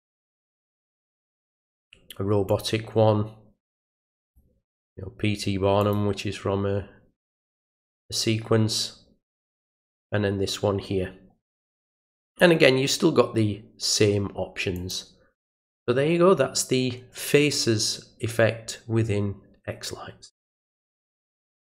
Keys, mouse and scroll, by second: 0.9 click, 2.5 click, 4.3 click, 5.8 click, 9.5 click, 12.3 click, 14.7 click.